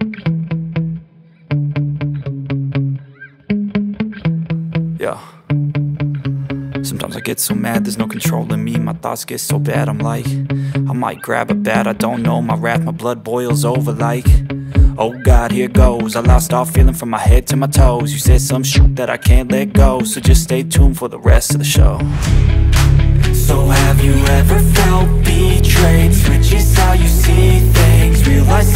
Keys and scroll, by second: 13.3 v, 19.1 alt+shift+super+z, 21.4 alt+shift+Return, 22.1 Return, 23.6 z, 26.0 space, 27.2 v.